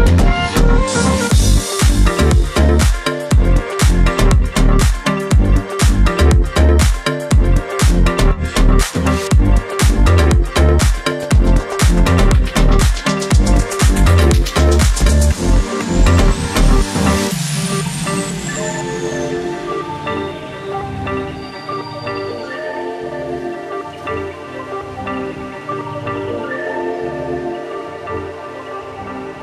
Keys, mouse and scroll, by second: 0.4-1.2 scroll up 1, 1.6-2.1 alt+scroll up 1, 2.5-3.0 alt+scroll down 1, 4.0 alt+scroll up 1, 4.6 click, 7.3 ctrl+c, 8.6 ctrl+b, 16.2-18.4 alt+shift+drag, 22.4 scroll down 1, 26.2 click.